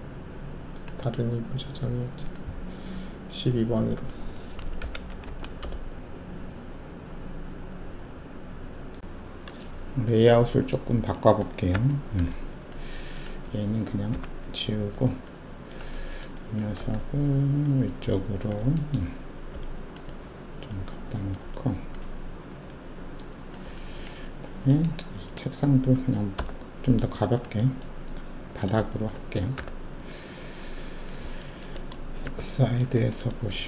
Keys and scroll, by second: 4.8 Left, 5.0 Delete, 5.2 Delete, 5.6 Return.